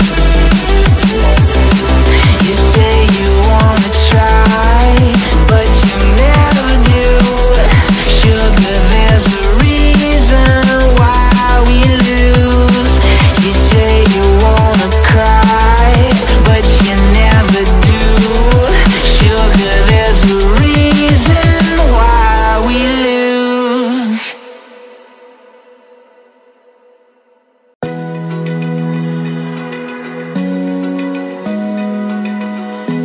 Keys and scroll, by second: 0.7 space, 1.2 space, 1.4 space, 4.4 space, 4.9 super+space, 5.0 super+space, 5.1 super+space, 5.2 super+space, 5.3 super+space, 5.4 super+space, 5.5 super+space, 9.8-10.6 space, 11.6 a, 13.7 BackSpace, 13.9 BackSpace, 14.1 BackSpace, 18.6 Tab, 20.0 Right, 20.3 Right, 21.5 Left, 22.1 Left, 22.7 Left, 23.8 v, 24.3 space, 24.8 alt+super+space, 24.8 alt+super+space, 28.9-29.7 space, 30.1 Tab, 30.6 space, 31.1 alt+super+space, 31.2 alt+super+space, 31.3 alt+super+space, 31.4 alt+super+space, 31.5 alt+super+space.